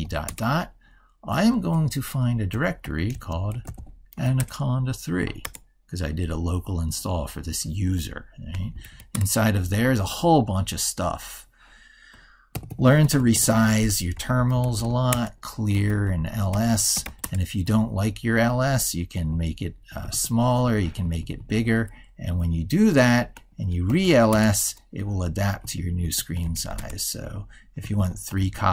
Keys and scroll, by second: 12.4 ctrl+-, 19.0 ctrl+-, 20.5 ctrl+=, 22.2 ctrl+0, 25.5 ctrl+-.